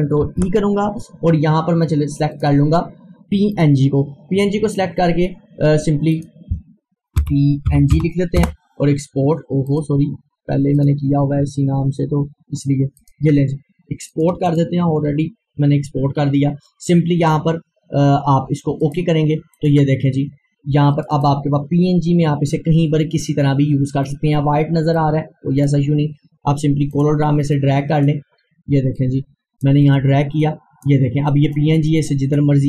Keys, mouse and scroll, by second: 0.3 ctrl+e, 2.4 click, 6.1 click, 7.2-8.4 typing, 8.4 Return, 9.7 click, 18.9 click, 19.1 click, 24.0 click, 24.2-32.6 drag.